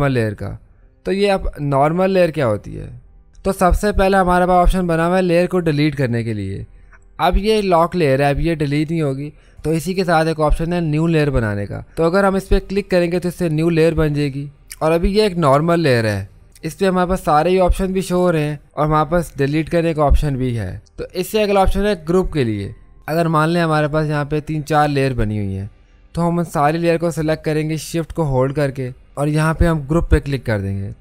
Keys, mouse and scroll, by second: 11.4-12.8 typing, 11.6 click, 12.8 click, 23.6 click, 23.6 typing, 30.2 click.